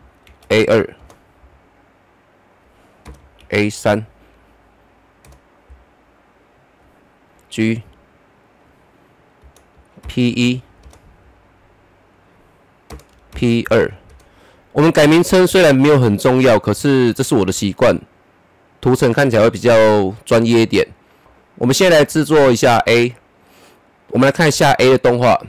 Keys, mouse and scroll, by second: 0.2 shift+a, 0.6 2, 0.9 Return, 2.3 click, 3.0 Return, 3.4 shift+a, 3.8 3, 5.2 Return, 6.3 click, 7.3 Return, 8.4 click, 8.4 click, 9.4 Return, 10.0 shift+p, 10.4 1, 10.8 Return, 12.0 click, 12.9 Return, 13.3 shift+p, 13.6 2, 14.1 Return, 21.2 click, 24.8-25.4 drag.